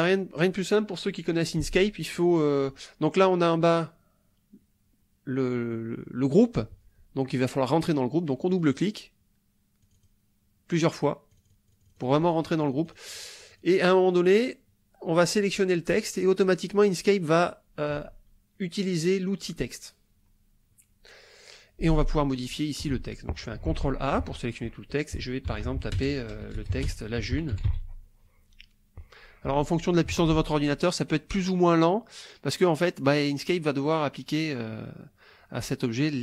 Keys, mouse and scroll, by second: 8.5 click, 9.8 click, 11.1-12.5 drag, 12.6-13.8 drag, 23.7 ctrl+a, 25.5-28.2 typing.